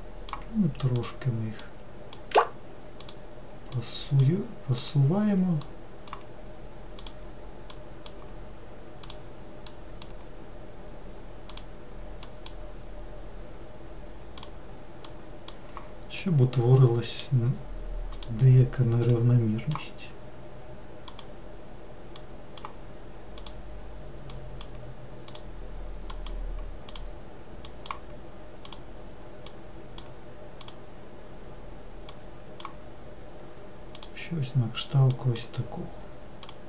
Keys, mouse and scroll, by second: 0.9 click, 1.6 click, 3.0 click, 3.8 click, 4.8 click, 5.6 click, 7.0 click, 7.7 click, 9.0 click, 9.7 click, 11.5 click, 12.2 click, 14.3 click, 15.1 click, 16.2-18.1 middle drag, 18.1 click, 19.1 click, 21.1 click, 22.2 click, 23.4 click, 24.3 click, 25.3 click, 26.1 click, 26.9 click, 27.6 click, 28.6 click, 29.4 click, 30.6 click, 32.1 click, 33.9 click, 35.1 click, 36.4 click.